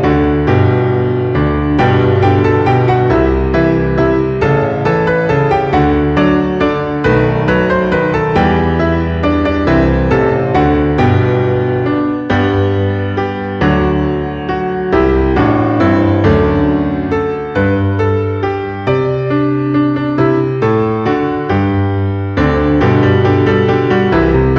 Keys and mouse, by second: 1.5 click, 4.0 click, 4.4 KP_0, 4.7 KP_Decimal, 5.0 KP_0, 6.0 click, 6.3 KP_4, 8.3 click, 8.6 KP_0, 8.8 KP_Decimal, 9.1 KP_0, 9.2 KP_1, 10.5 click, 12.3 click, 14.6 middle click, 16.9 click, 17.6 alt+z, 18.4 g, 21.2 click, 21.5 shift+middle click, 22.2 g, 23.1 click, 23.5 e, 24.5 click.